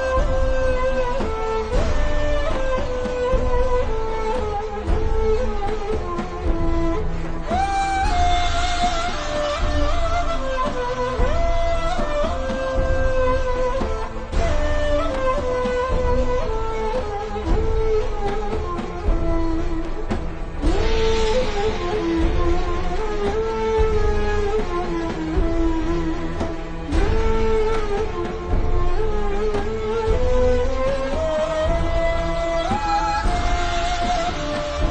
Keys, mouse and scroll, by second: 5.6 click, 15.2 click, 17.0 z, 17.5 click, 19.6 ctrl+z, 19.9 click, 22.0 v, 22.1 click.